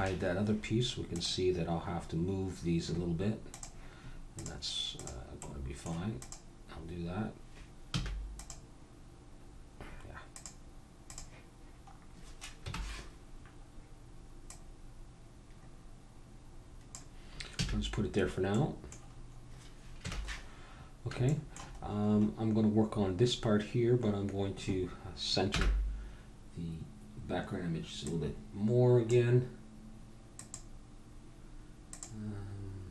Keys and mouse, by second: 1.1-3.1 drag, 3.5-5.4 drag, 5.4 middle click, 5.5-12.2 drag, 8.0 a, 12.2-14.5 middle drag, 12.6 KP_1, 14.5-16.2 drag, 17.6 a, 17.9 middle click, 20.0 KP_1, 20.7 middle click, 23.2 middle click, 25.5 n, 28.1-29.9 drag, 30.4-32.9 drag.